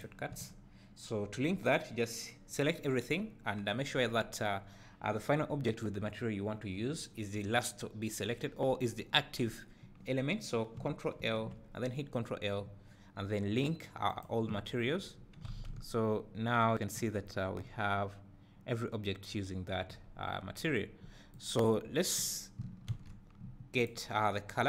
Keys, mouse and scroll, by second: 0.1 click, 0.3 n, 11.2 ctrl+l, 15.0-15.5 scroll up 2, 15.5 alt+a, 15.7 `, 17.2 scroll up 1, 17.6 `, 20.0 scroll down 1, 21.4-22.5 drag, 23.0 shift+d, 23.9 click.